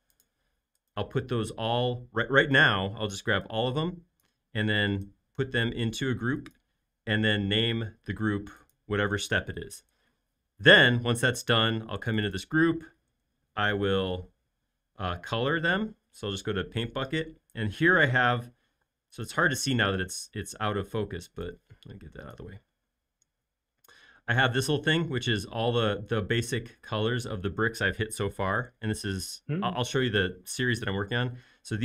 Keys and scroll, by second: 2.2 space, 14.3 shift+q, 16.8 b, 18.8 space.